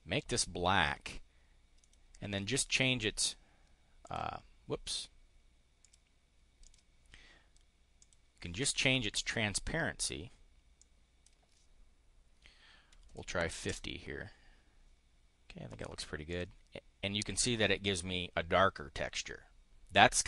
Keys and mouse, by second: 1.7 click, 3.9 click, 5.7 click, 6.5 click, 7.9 click, 10.7 click, 12.8 5, 13.6 Return, 15.6 click, 16.1 click.